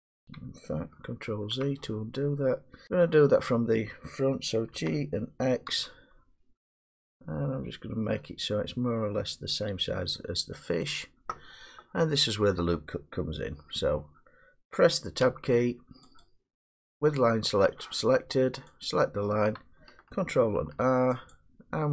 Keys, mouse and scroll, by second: 0.3 middle click, 1.2 ctrl+z, 2.4 middle click, 2.9 1, 4.7 g, 5.7 x, 10.8 click, 15.2 Tab, 16.5 click, 18.8 click, 20.5 ctrl+r, 21.3 click.